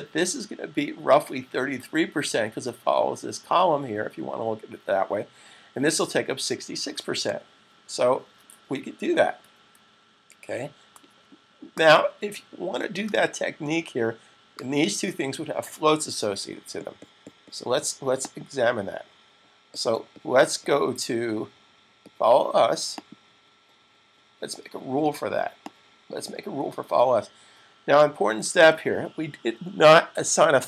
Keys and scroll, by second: 27.5 super+s.